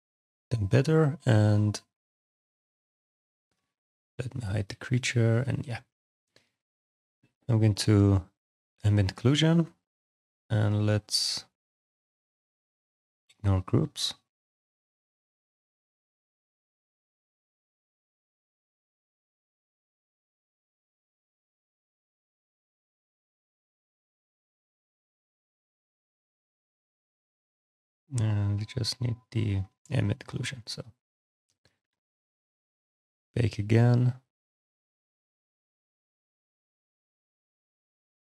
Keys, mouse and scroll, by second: 0.1 click, 0.4 right click, 0.7 click, 1.0 right click, 3.3 click, 4.3 click, 6.3 click, 8.6 click, 12.6 click, 21.1 click, 24.9 click, 27.7 click, 28.8 click, 31.0 click, 37.7 scroll.